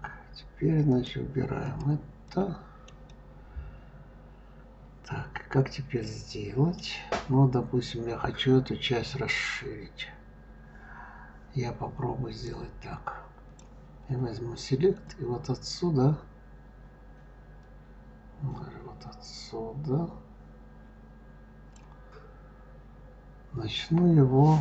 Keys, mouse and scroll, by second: 0.7-1.1 drag, 1.4 click, 2.1-5.9 middle drag, 12.3-17.9 drag.